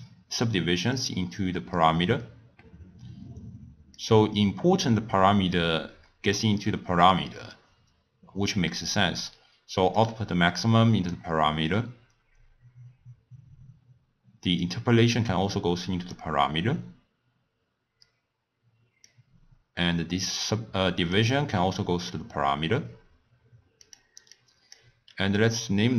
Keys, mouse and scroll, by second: 3.9 drag, 10.0 click, 14.6 click, 19.0 click, 24.3-25.9 drag.